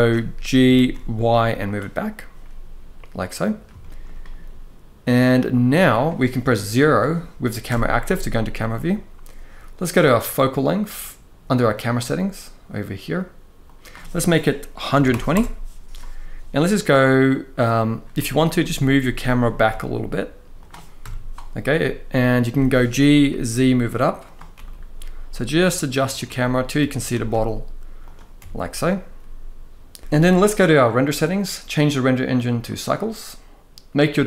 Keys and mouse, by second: 0.3 g, 0.6 y, 2.1-3.2 middle drag, 3.5 shift+middle drag, 7.4 KP_0, 11.5 click, 13.4-15.0 drag, 17.9 middle drag, 18.7 g, 19.4 y, 20.3 click, 20.7 KP_0, 22.2 g, 22.8 z, 23.9 click, 24.3 g, 24.3 middle click, 25.9 click, 26.5 g, 26.8 z, 27.7 click, 28.1 g, 28.1 middle click, 31.4-32.5 drag, 33.7-34.2 drag.